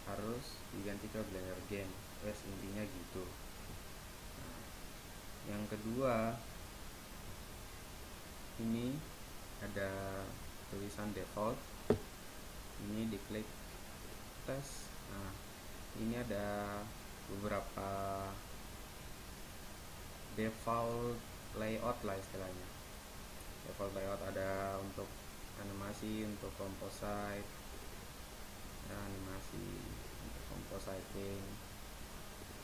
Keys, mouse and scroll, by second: 2.7-4.7 right drag, 14.1-15.9 drag, 30.2 middle click.